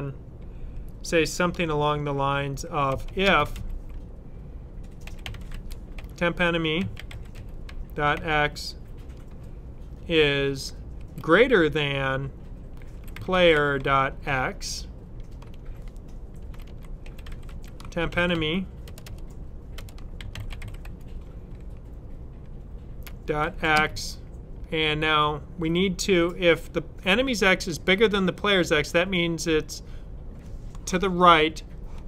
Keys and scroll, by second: 2.5-8.5 typing, 10.8 typing, 12.6-21.2 typing, 22.7-23.8 typing.